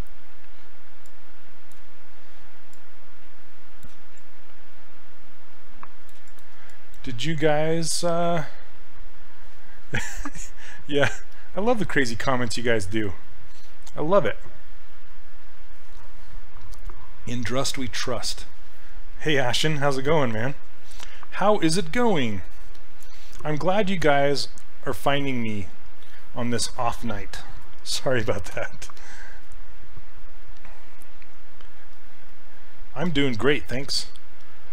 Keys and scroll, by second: 28.6 q.